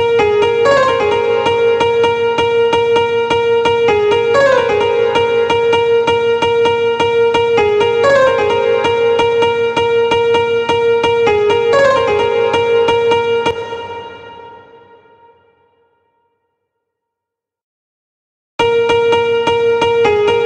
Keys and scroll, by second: 15.2 ctrl+b, 18.0 space.